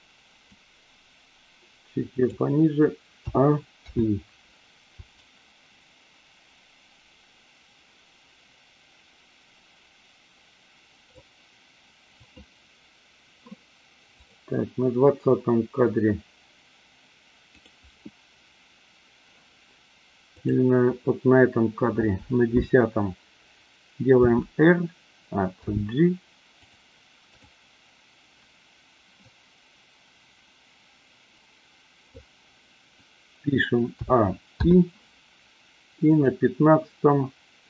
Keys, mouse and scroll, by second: 0.5-2.3 drag, 3.1 a, 3.8 i, 5.1-11.2 drag, 12.2 click, 14.2 click, 20.3 click, 24.1 r, 25.7 g, 26.7 click, 27.3 click, 29.3-32.2 drag, 33.9 a, 34.5 i, 36.2 click.